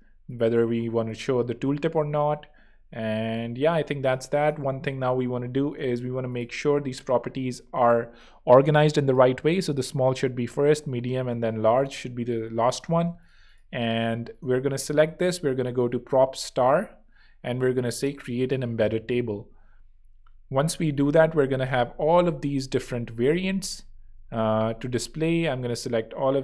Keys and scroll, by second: 12.9 super+x, 13.3 alt+super+z, 14.0 alt+z, 15.0 super+p, 15.4-17.1 typing, 18.0 Return.